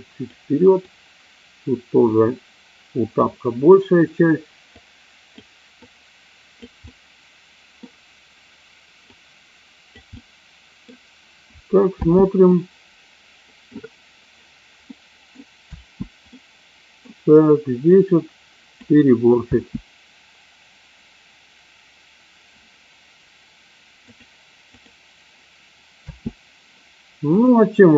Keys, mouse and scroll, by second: 0.9-3.1 drag, 4.6 click, 5.7 click, 6.7 middle click, 9.1 click, 10.1 middle click, 11.8 space, 12.5-14.2 middle drag, 15.1 middle click, 16.2 space, 16.5 middle click, 18.0 click, 19.5 space, 24.1-24.9 drag, 26.1 space, 27.4 click.